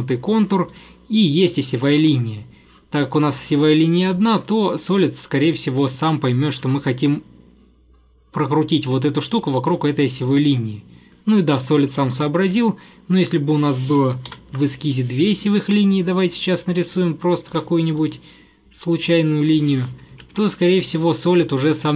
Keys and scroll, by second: 14.4 ctrl+8, 20.2 Escape, 20.5 Escape.